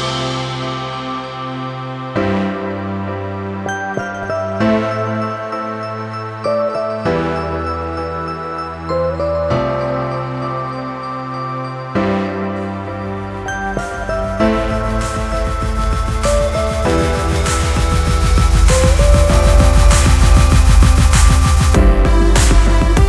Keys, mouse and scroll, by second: 1.2 click, 1.7 F4, 4.2 click, 5.0 click, 6.3 click, 6.5 double click, 6.9 click, 7.0 double click, 7.4 click, 8.2 F4, 9.1 F9, 9.8 Page_Down, 10.4 Page_Down, 10.9 Page_Down, 11.8 Page_Down, 14.9-15.3 scroll up 1, 15.8 scroll up 1, 16.0 click, 17.8 ctrl+o, 18.5 scroll down 1, 19.3 click, 20.0 click, 21.3 click, 22.1 F4, 23.0 F9.